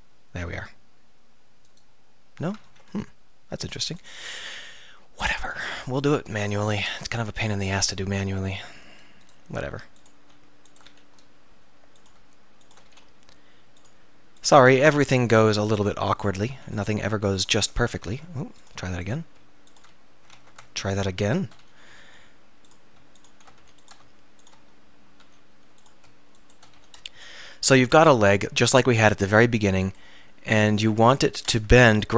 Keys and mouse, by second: 0.5 x, 2.7 ctrl+z, 4.6-5.8 middle drag, 6.2 middle click, 7.8 f, 10.9 f, 11.2-12.5 middle drag, 12.9 f, 14.8 f, 16.6 f, 17.6 f, 18.1 ctrl+z, 20.0 f, 20.4 ctrl+z, 21.7 f, 23.7 f, 25.3 f, 26.8 f, 27.2 KP_3, 28.1 click, 29.9 click, 30.3 click, 30.4 click, 30.6 middle click, 31.7 KP_3, 32.0 KP_1.